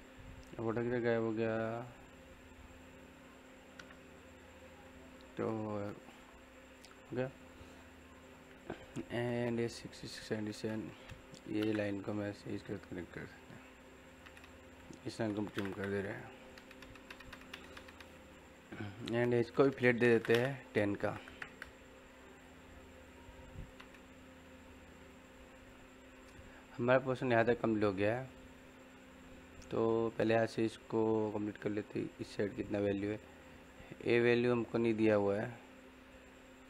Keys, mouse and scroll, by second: 3.7 Home, 4.5 scroll down 1, 4.8 middle click, 6.2 scroll up 1, 6.5 middle click, 8.5-8.8 scroll up 1, 8.8 scroll down 1, 8.9 middle click, 9.8 scroll up 1, 9.9 middle click, 11.3 l, 11.5 space, 12.5 click, 14.9-15.8 typing, 15.8 click, 19.9 f, 20.3 space, 22.2 click, 23.8 scroll down 1, 23.9 middle click, 24.3 scroll up 1, 24.5 middle click.